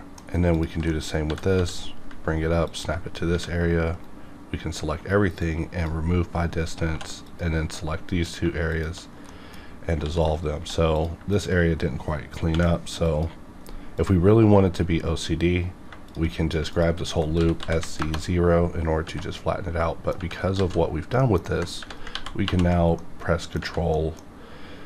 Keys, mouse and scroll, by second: 0.5 alt+click, 0.9 middle click, 1.2 g, 1.5 z, 2.7 ctrl+click, 3.3 a, 3.9 right click, 5.4-6.9 drag, 6.9 2, 7.2 click, 7.7 middle click, 8.7 shift+click, 9.3 middle click, 9.6 scroll up 1, 10.0 ctrl+x, 10.6 1, 10.9 click, 11.3 shift+click, 12.5 m, 13.0 click, 15.6 scroll down 1, 16.1 shift+click, 17.4 s, 17.6 z, 17.8 KP_0, 18.0 KP_Enter, 18.8 scroll down 1, 19.2 middle click, 20.8 alt+a, 21.2 middle click, 22.1 1, 22.4 ctrl+2, 23.0 middle click, 23.9 middle click, 24.3 scroll up 1.